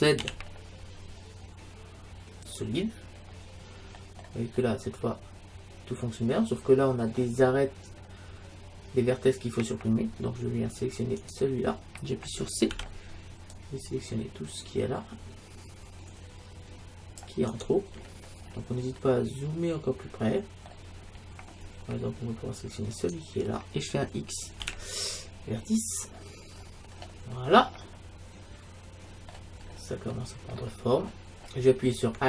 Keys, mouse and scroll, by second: 0.2 z, 4.0-6.7 middle drag, 8.0-11.2 middle drag, 10.2-11.2 scroll down 1, 11.2-13.1 right drag, 12.7 c, 18.0-20.9 middle drag, 21.0-23.0 middle drag, 23.0-24.7 right drag, 24.7 x, 26.6 middle click, 27.8-32.2 middle drag.